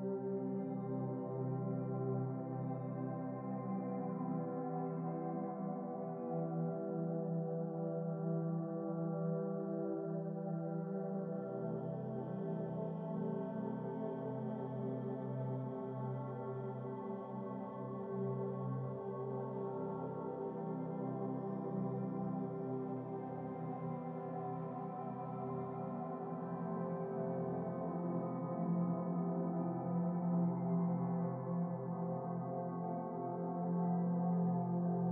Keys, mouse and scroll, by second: 1.1-4.5 drag, 5.4 click, 7.5 KP_Decimal, 8.5 scroll up 4, 11.4 middle click, 12.1-14.5 drag, 14.8 KP_0, 17.7 click, 18.5-19.7 drag, 23.9-25.0 drag, 24.8 scroll up 1, 25.0-26.5 middle drag, 26.5 click, 27.1-28.4 drag, 28.7 click, 30.3-31.9 drag, 32.8-33.2 middle drag, 33.2 click, 34.2-35.1 drag.